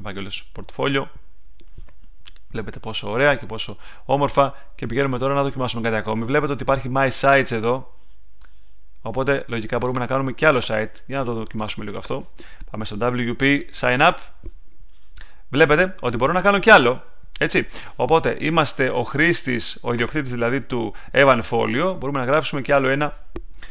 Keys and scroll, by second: 12.8-13.7 typing, 13.7 Return.